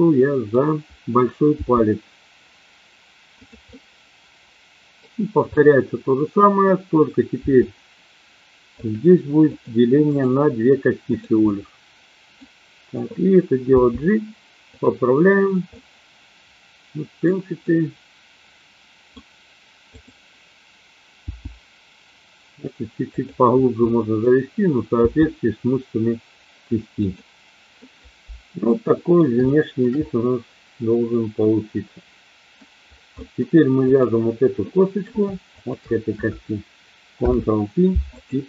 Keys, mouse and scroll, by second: 1.6 g, 3.6-5.1 middle drag, 5.5-6.6 middle drag, 7.4 e, 8.7 click, 10.1-11.2 right drag, 11.5 middle click, 13.7 g, 14.7 click, 15.7-17.2 middle drag, 17.6-19.2 middle drag, 21.1 g, 23.1 click, 23.7 middle click, 24.9 g, 27.0 click, 27.9-29.2 middle drag, 29.4 shift+middle click, 30.0-32.6 middle drag, 33.2 middle click, 33.9 click, 34.6 middle click, 35.5 shift+click, 37.1 ctrl+p.